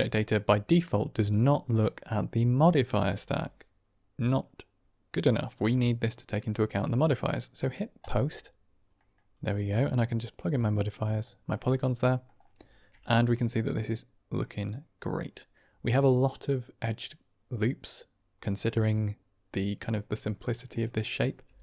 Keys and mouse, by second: 7.9 click, 8.9 middle click, 9.7-10.4 drag, 11.0 middle click, 11.9 drag, 13.3 click, 14.3-15.4 middle drag, 18.7-19.6 middle drag, 19.7 click, 20.9 drag, 21.3 g.